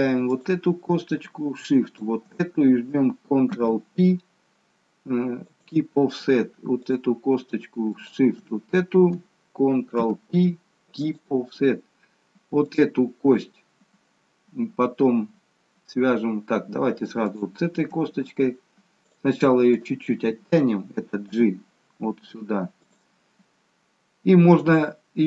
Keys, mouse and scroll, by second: 0.2 click, 1.7 shift+click, 4.7 ctrl+p, 6.8 click, 7.9 shift+click, 10.9 ctrl+p, 12.7 click, 17.3 shift+click, 19.0 click, 19.7 click, 21.3 g.